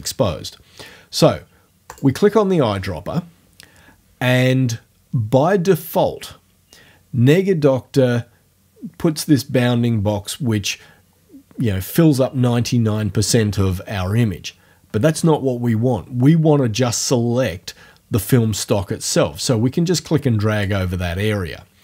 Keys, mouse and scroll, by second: 1.9 click, 18.8-20.8 drag.